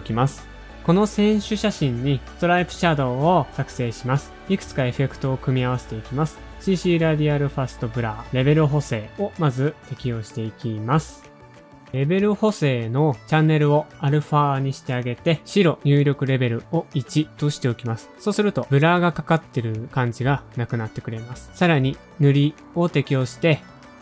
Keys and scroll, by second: 0.0-2.0 typing, 2.2 shift+Page_Up, 3.6 shift+Page_Down, 11.9 typing, 17.5-18.2 typing, 21.4-22.5 typing.